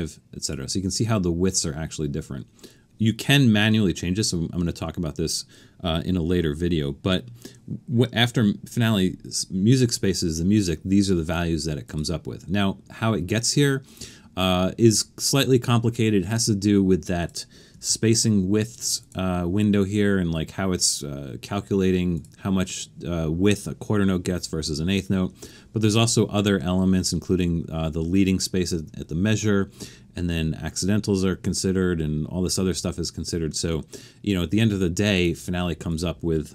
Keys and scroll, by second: 17.9 alt+super+a.